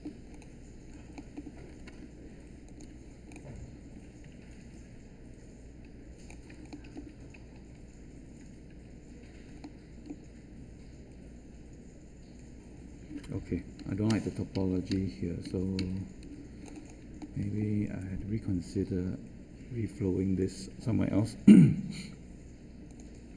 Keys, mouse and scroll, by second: 21.7 q.